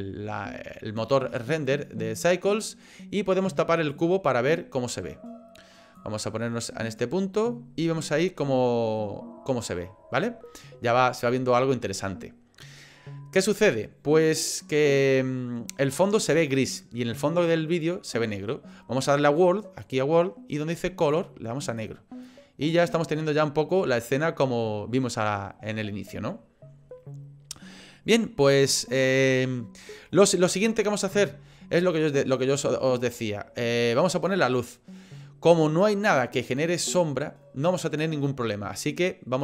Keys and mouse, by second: 3.9 click, 6.0-7.0 drag, 19.8 click, 21.0 click, 31.8-34.3 drag.